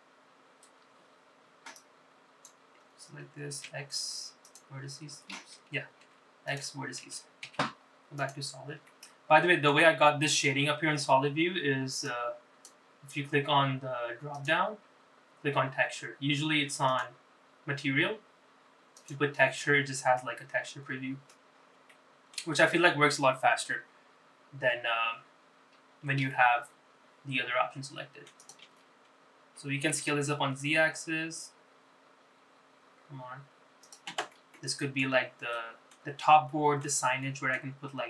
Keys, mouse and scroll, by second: 2.9-4.9 drag, 4.9 x, 6.5 ctrl+z, 7.1 x, 8.6 z, 10.0 middle click, 13.2-20.6 drag, 21.3-22.5 middle drag, 22.7 scroll up 2, 23.0 shift+middle click, 23.7 scroll down 2, 26.3 Tab, 27.4 s, 30.3 ctrl+z, 31.0 s, 35.7 middle click, 36.7 middle click, 37.6 middle click.